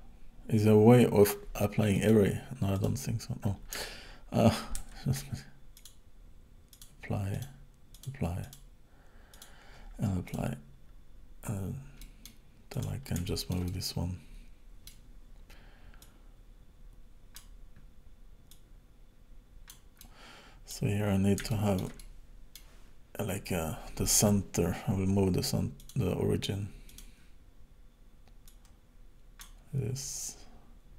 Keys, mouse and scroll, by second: 2.0 click, 4.8 ctrl+z, 5.8 click, 7.4 click, 8.5 click, 10.3 click, 12.0 middle click, 12.8 click, 13.3 shift+middle click, 13.7 middle click, 16.0 click, 18.5 click, 20.0 middle click, 21.0-21.5 scroll up 3, 21.5 shift+middle click, 22.0 middle click, 22.9-23.4 scroll up 5, 25.8 click, 26.9 click, 28.5 click.